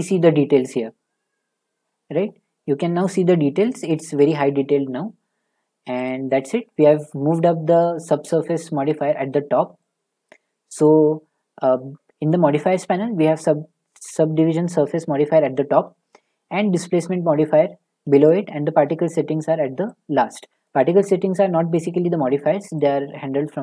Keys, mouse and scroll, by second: 2.1 click, 4.7 middle click, 6.1-7.9 middle drag, 22.8 click.